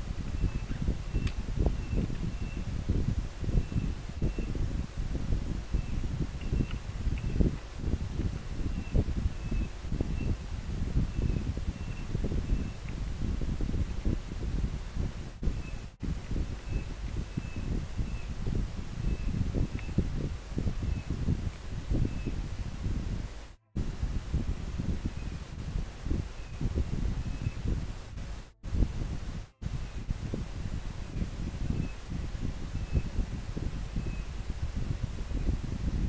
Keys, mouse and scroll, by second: 4.3-5.1 scroll up 1, 5.4 scroll down 1, 6.1-7.1 scroll up 1, 16.3 scroll up 1.